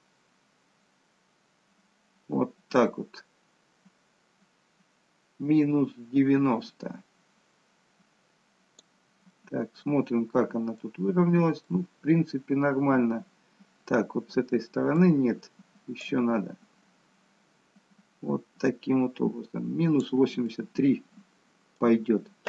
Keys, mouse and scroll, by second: 9.5 middle click, 11.8 middle click, 16.1 click, 20.5 middle click.